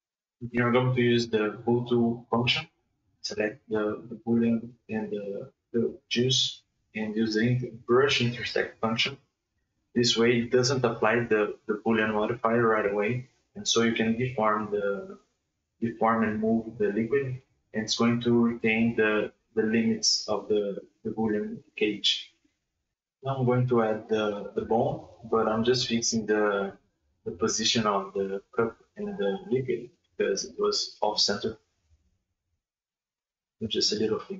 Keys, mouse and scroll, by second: 0.0 h, 0.2 scroll down 2, 0.4-1.1 middle drag, 1.1 right click, 1.6 shift+right click, 2.1 ctrl+shift+b, 5.1 middle click, 5.4-5.8 scroll up 2, 5.8-7.5 shift+middle drag, 7.5 right click, 7.9 right click, 8.3 r, 10.0 ctrl+z, 10.6 right click, 11.0 h, 13.4 click, 13.8-15.1 middle drag, 15.1-15.5 drag, 15.5-15.9 middle drag, 15.9 right click, 16.2 right click, 16.5 shift+s, 18.3-19.6 middle drag, 19.6 Tab, 20.4 middle click, 21.4 Tab, 21.6-22.1 middle drag, 22.1 shift+c, 22.4-22.8 middle drag, 22.8 scroll up 2, 22.9 KP_1, 23.2 shift+middle drag, 23.4 scroll up 2, 23.6 shift+middle click, 23.9 shift+a, 24.2 KP_3, 24.9 right click, 25.2 shift+right click, 26.0 click, 26.4 click, 26.7 drag, 26.9 click, 27.1 ctrl+drag, 27.7 ctrl+click, 28.2-29.0 drag, 29.0 ctrl+a, 29.6-30.0 shift+middle drag, 30.0 shift+a, 31.6-33.2 drag, 33.2-33.7 middle drag, 33.7 right click, 34.1 h, 34.2 right click.